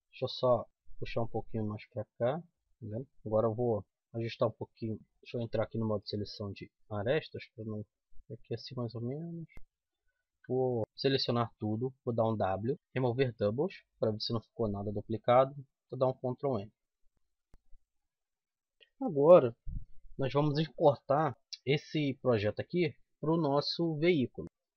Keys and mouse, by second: 0.8-2.5 drag, 2.5 KP_7, 2.8 a, 3.6 c, 4.4 click, 5.4 c, 6.9-9.5 drag, 10.3 a, 10.8 z, 10.9 a, 11.9 w, 15.8 ctrl+n, 16.7 z, 17.1 Tab, 17.2 z, 17.5 Tab, 18.0 Tab, 18.8-19.9 middle drag, 22.1-24.4 middle drag.